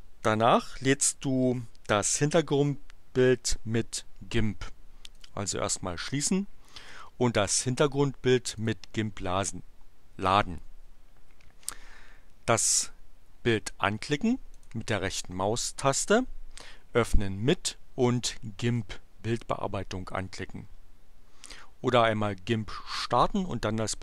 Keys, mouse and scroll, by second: 5.1 click, 8.4 click, 14.6 right click, 19.3 click.